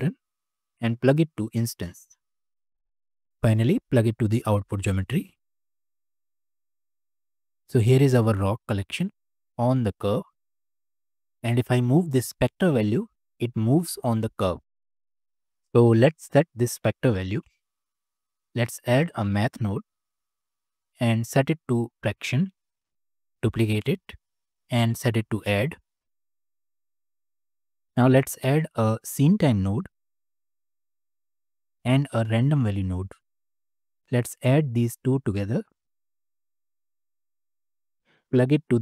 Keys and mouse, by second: 0.1 click, 1.2-2.0 drag, 2.9 click, 4.1-5.3 drag, 6.2-6.9 middle drag, 10.6 click, 12.4-15.1 drag, 17.4 click, 18.1 shift+a, 20.7-23.1 drag, 23.4 shift+d, 24.8-26.2 drag, 26.5 click, 26.9 click, 27.3 click, 27.8 shift+a, 31.5 click, 32.0 shift+a, 34.0-35.4 drag, 36.0 drag, 36.3 click, 37.5 click, 38.3-38.8 drag.